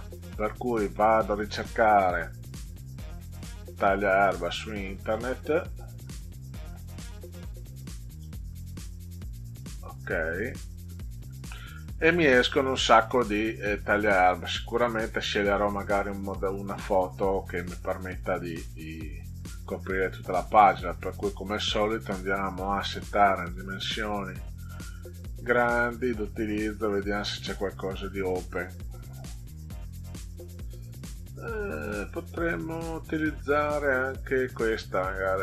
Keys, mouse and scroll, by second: 5.4 click, 8.2 click, 10.4 click, 12.9 click, 16.1 scroll down 2, 17.3 middle click, 17.8 scroll up 2, 18.6 click, 22.6 click, 23.4 click, 25.7 click, 27.5 click, 28.4 click.